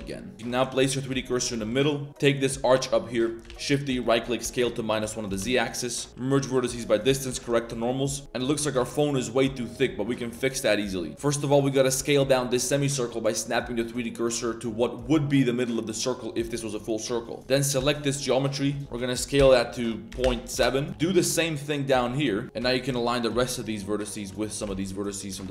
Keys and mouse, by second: 0.0-0.1 typing, 0.7 shift+click, 1.3 ctrl+click, 1.6 shift+s, 2.1 3, 3.4 shift+d, 4.4 s, 5.6 a, 6.1 m, 7.2 shift+n, 7.6 Tab, 7.7 middle drag, 7.9 click, 8.4 a, 8.6 a, 8.7 shift+s, 9.0-9.7 middle drag, 10.3 shift+click, 10.9 drag, 11.1 ctrl+z, 11.2 click, 11.7 shift+click, 11.9 shift+s, 13.1 click, 13.9 click, 14.0-14.4 middle drag, 15.9 middle drag, 17.2 middle drag, 17.8 shift+click, 18.1 middle click, 18.7 middle click, 19.4 s, 20.9 shift+s, 22.4 ctrl+z, 22.4 s, 22.6 s, 24.1 click, 24.4 click, 24.6 shift+s, 25.1 click.